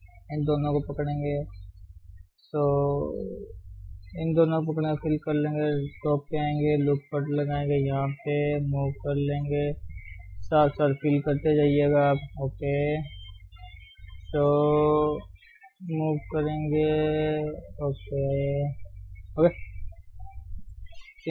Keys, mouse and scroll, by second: 1.1 shift+click, 4.2 shift+click, 4.9 f, 5.7 KP_7, 6.0-6.5 scroll up 3, 6.5 shift+middle click, 7.4 ctrl+r, 8.4 g, 10.2 click, 11.2 f, 11.4 scroll down 5, 11.5 middle click, 12.5 scroll up 1, 12.6 middle click, 13.4 scroll up 1, 13.9 click, 15.7 g, 16.6 click, 16.8 g, 18.7 click, 18.9 g, 19.4-20.4 middle drag, 20.4 click.